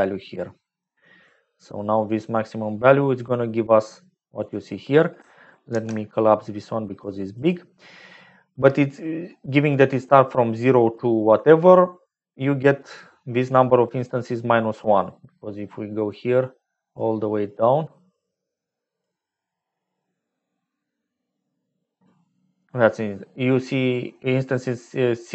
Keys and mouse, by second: 0.0 click, 4.3 click, 5.6 ctrl+h, 6.5 click, 7.3 click, 16.2 click, 18.0 click.